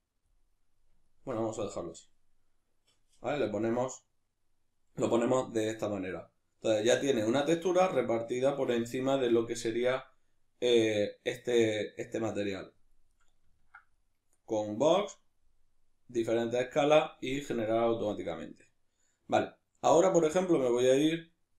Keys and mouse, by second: 0.8-21.5 ctrl+middle drag.